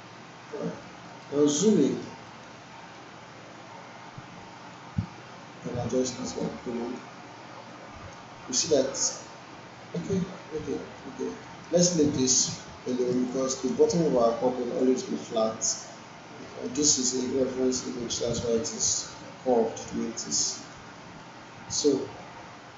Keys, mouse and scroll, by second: 0.8 alt+middle click, 1.3 alt+right click, 1.8 alt+middle click, 2.3 alt+right click, 2.6-3.2 alt+middle drag, 4.8-6.3 drag, 6.4-7.0 alt+right drag, 8.4 alt+middle click, 10.0-10.7 alt+middle click, 10.8 alt+right click, 11.3 alt+middle click, 12.9 alt+middle click, 13.2-13.8 alt+right click, 14.1-15.0 alt+click, 15.3-15.9 alt+click, 16.4 alt+middle click, 18.1 alt+middle click, 20.4-21.3 alt+right click, 20.9-22.5 alt+middle drag.